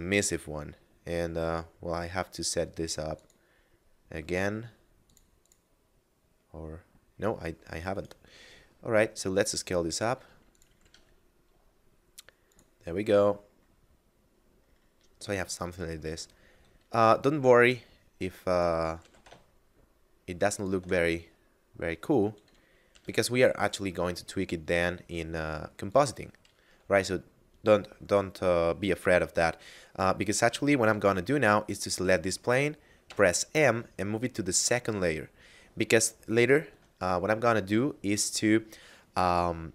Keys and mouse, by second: 2.8 click, 7.6 right click, 8.0 s, 10.2 click, 10.5 g, 10.6 z, 11.9 click, 13.9 middle click, 15.6 s, 18.2 click, 18.5 g, 18.8 x, 20.2 shift+click, 22.4 g, 22.5 z, 25.4 click, 31.3 right click, 32.7 m, 34.2 click, 35.8 shift+click.